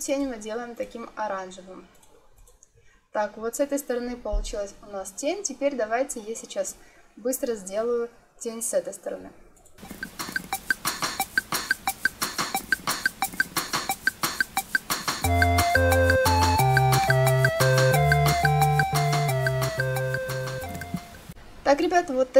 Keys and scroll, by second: 9.9 ctrl+c, 10.0 ctrl+f, 10.4 ctrl+f, 12.6 ctrl+c, 12.8 ctrl+f, 13.3 ctrl+c, 13.4 ctrl+f, 15.1 ctrl+c, 20.7 0, 20.8 Return.